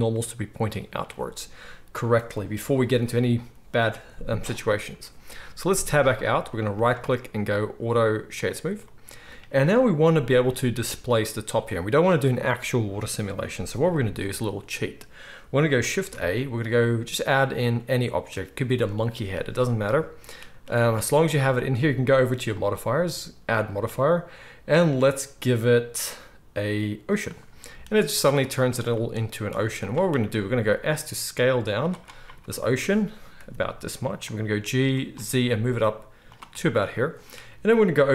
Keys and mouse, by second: 5.7 Tab, 6.8-8.4 middle drag, 6.8-8.4 right drag, 16.0 shift+a, 20.4 z, 20.8-22.6 middle drag, 22.6-23.4 drag, 23.4-31.8 middle drag, 27.6-28.3 drag, 27.6-28.3 right drag, 29.5 z, 30.8 s, 31.8-38.1 right drag, 33.4 s, 34.5 g.